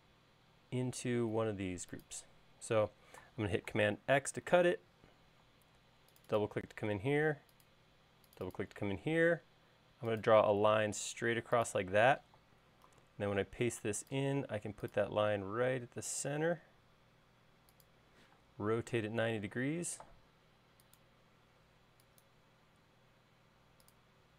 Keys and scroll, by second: 5.3 super+x, 6.4 space, 9.8 l, 13.8 super+v, 19.2 q.